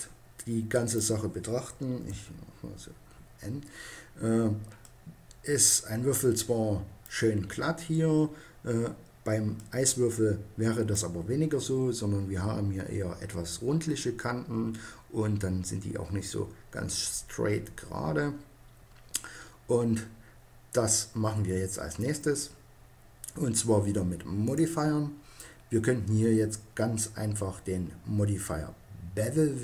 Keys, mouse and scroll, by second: 1.8 n.